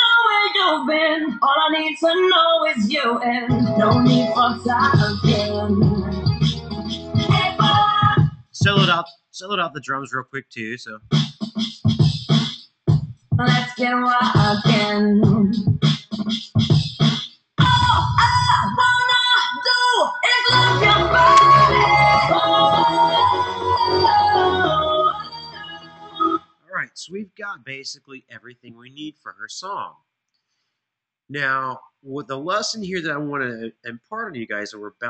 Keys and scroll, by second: 26.1 space.